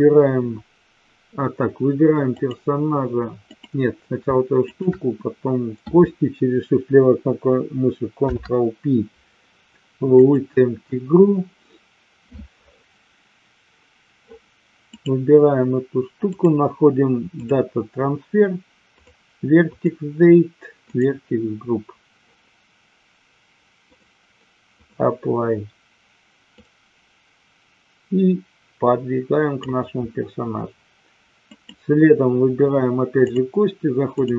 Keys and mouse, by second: 2.4 click, 3.5 click, 4.6 shift+click, 8.1 ctrl+p, 14.9 click, 16.4-17.5 drag, 19.0 click, 20.9 click, 24.0-25.2 drag, 26.6-29.6 drag, 31.5 click, 33.4-34.2 drag.